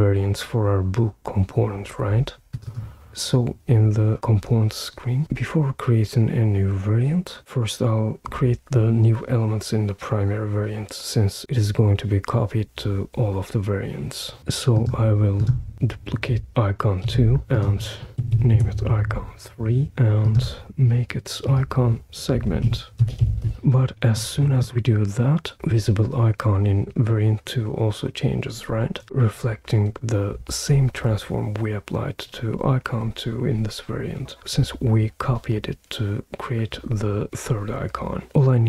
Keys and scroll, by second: 17.0 super+d, 18.2 BackSpace, 18.3 3, 18.5 Return, 19.5-20.3 typing, 22.1-23.9 typing.